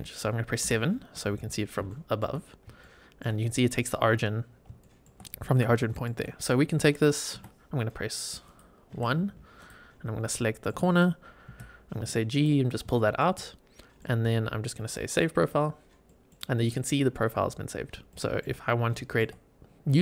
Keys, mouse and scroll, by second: 0.5 KP_7, 1.5 scroll up 2, 1.8 shift+middle click, 2.3 scroll up 2, 2.7 shift+middle click, 4.7 shift+middle click, 5.7 shift+middle click, 7.2 1, 8.4 click, 8.8 1, 9.5 click, 10.0 scroll down 2, 10.3 shift+middle click, 11.4 g, 12.3 click, 12.6 scroll down 2, 12.9 shift+middle click, 13.3 middle click, 15.3 click, 16.0 middle click, 17.6 scroll down 3, 18.0-18.3 shift+middle drag, 18.6 scroll down 1, 18.9 shift+middle click.